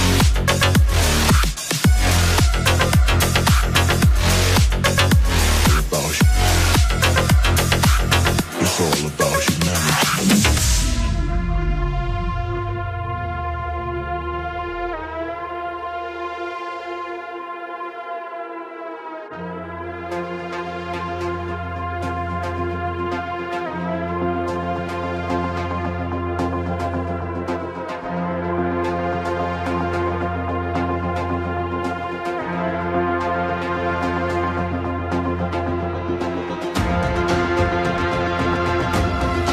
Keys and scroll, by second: 33.7 BackSpace, 34.5 Return.